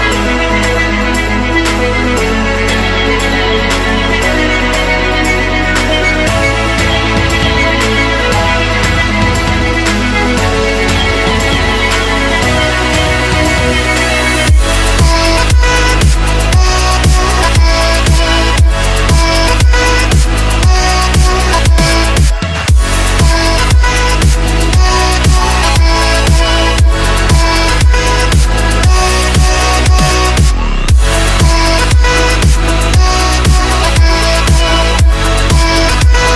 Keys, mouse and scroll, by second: 11.9 KP_5, 12.4 click, 13.3 F10, 14.1 right click, 15.9-16.2 scroll up 1, 16.9-18.1 drag, 17.9 Delete, 18.9 click, 19.4-21.9 typing, 20.1 click, 22.2 Return, 23.0-25.8 drag, 25.8 Tab, 25.9 F10, 26.7-27.9 drag, 28.3 right click, 28.6 scroll down 1, 29.3-30.1 scroll up 1, 30.1 right click, 30.7 Delete, 31.5-36.3 drag.